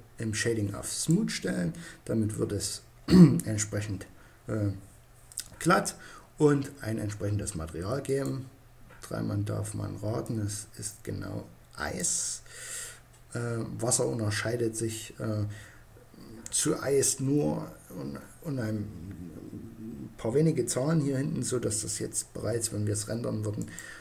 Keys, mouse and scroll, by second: 7.3-9.2 drag, 9.5-11.3 drag, 22.9-24.0 drag.